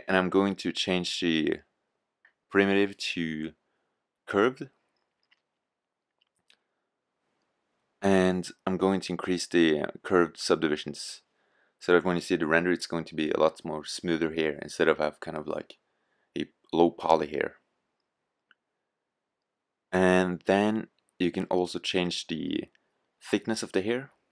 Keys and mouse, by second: 5.5-7.1 drag, 12.7-14.4 drag.